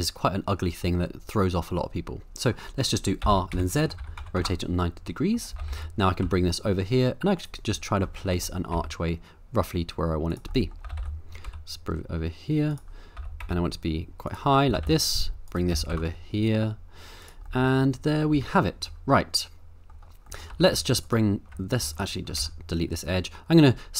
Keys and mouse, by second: 3.2 r, 3.5 z, 4.0 KP_9, 4.2 KP_0, 4.3 KP_Enter, 5.2 middle click, 5.5 g, 5.7 y, 6.2 x, 7.4 click, 7.8 middle drag, 8.4-8.7 middle drag, 8.7 g, 10.3 click, 10.5 middle drag, 10.8 g, 11.0 t, 11.0 y, 11.5 x, 12.7 click, 13.2 g, 13.4 z, 14.7 g, 14.8 y, 15.5 right click, 15.7 g, 15.9 x, 17.2 click, 17.5 middle click, 17.7-18.2 middle drag, 18.3 Tab, 18.9 middle click, 20.3 middle click, 20.5 2, 21.9 click, 22.4 x.